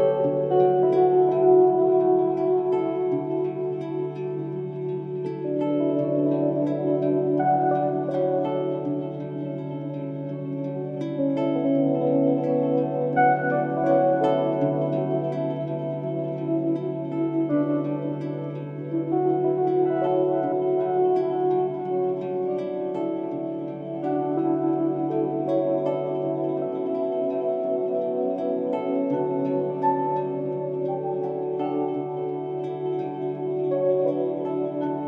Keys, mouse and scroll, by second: 20.1-20.8 typing, 20.3 click.